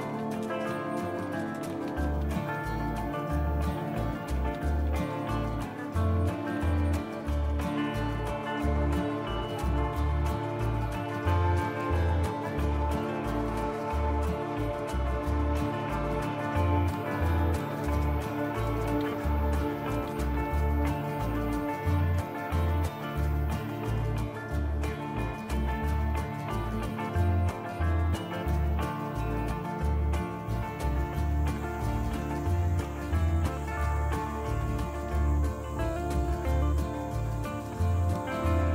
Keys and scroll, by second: 0.0-7.7 typing, 15.7 typing, 17.6-21.3 typing, 22.0 Return, 23.8 Return, 31.3-36.6 typing.